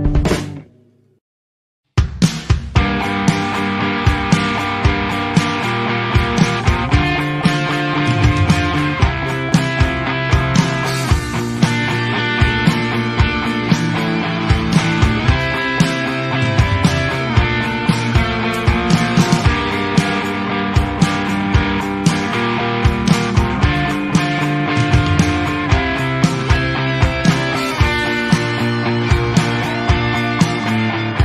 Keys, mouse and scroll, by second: 0.0 Tab, 0.1 z, 1.2 click, 1.4-2.6 drag, 2.9-3.2 shift+middle drag, 3.2-3.8 right drag, 3.8-4.1 middle drag, 4.1 scroll up 1, 4.3 scroll down 1, 4.4-5.1 shift+middle drag, 5.1 Tab, 5.5 ctrl+r, 7.1 click, 7.6 ctrl+b, 10.0 ctrl+r, 10.9 ctrl+b, 12.3 Tab, 12.5-12.8 middle drag, 12.8 scroll down 3, 13.0-13.8 middle drag, 13.8-14.4 scroll up 1, 14.4 shift+middle click, 14.5-14.9 scroll up 1, 14.9-15.4 middle drag, 15.4 alt+a, 15.7 middle click, 15.9 scroll up 1, 15.9 click, 16.2-16.6 shift+middle drag, 16.6 click, 17.3-18.4 drag, 18.6-20.1 middle drag, 20.1-20.9 scroll up 1, 20.9 click, 22.1-23.2 drag, 23.6 click, 24.2 middle click, 25.1 click, 25.4 scroll down 1, 25.6 middle drag, 25.8 Tab, 26.5 ctrl+r, 28.1 ctrl+r, 29.2 alt+a, 29.6 ctrl+r, 30.7 alt+a, 31.0 Tab, 31.1 click.